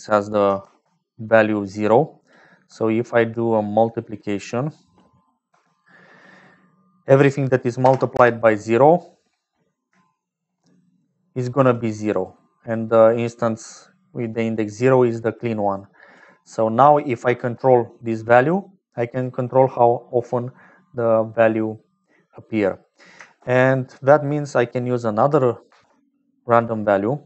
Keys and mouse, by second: 0.0 click, 0.6 shift+a, 5.8 click, 7.1-9.1 drag, 10.1 shift+click, 11.0 click, 12.2 click, 15.7 click, 16.9 click, 18.5 click, 22.8 click, 23.3 shift+a, 25.7 shift+d.